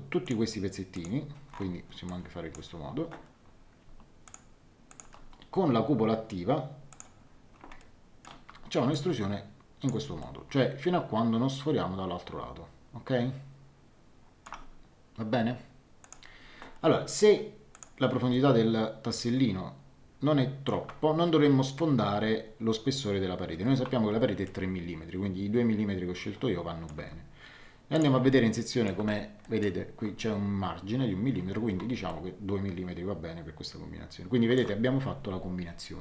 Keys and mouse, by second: 0.2 click, 2.0 click, 4.2 click, 6.9 click, 7.7 shift+middle click, 8.9 click, 10.2 shift+middle click, 16.0 click, 17.7 click, 18.3 shift+middle click, 24.4 shift+middle click, 27.9 click, 28.3 shift+middle click, 29.4 middle click, 32.0 shift+middle click.